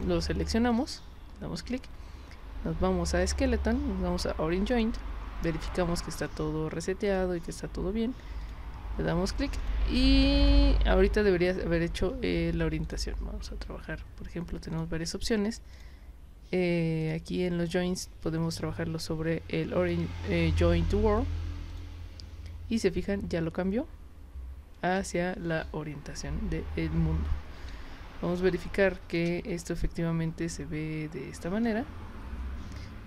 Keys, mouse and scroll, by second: 0.0 click, 0.7 click, 3.2 click, 4.7 click, 6.2 click, 7.0 click, 8.4 click, 9.6 click, 10.4 click, 12.8 click, 14.7 click, 15.7 click, 17.0 click, 18.5 click, 21.7 click, 27.7 space, 28.4-29.1 drag.